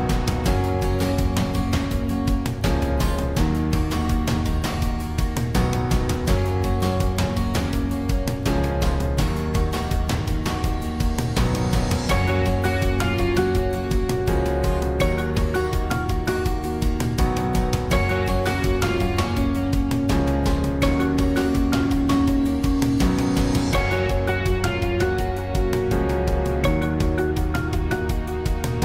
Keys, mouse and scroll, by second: 0.3 z, 1.1 b, 1.6 z, 2.7 Tab, 3.9 l, 4.6 s, 5.7 r, 7.2-8.1 typing, 7.3 Tab, 9.5 s, 10.3 g, 12.7 click, 14.2 click, 14.6 g, 15.4 click, 15.9 g, 16.0 KP_1, 16.4 KP_3, 17.4-19.1 drag, 19.4 s, 20.3 g, 24.1 click, 24.1-25.6 typing, 26.7 a, 27.1 a, 27.1 KP_1, 27.3-28.8 drag.